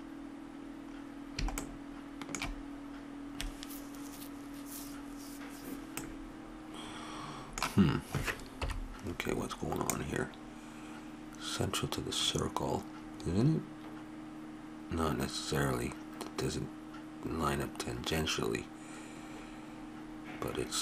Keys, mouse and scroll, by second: 6.0-7.2 middle drag, 8.6 KP_7, 9.9-11.4 drag.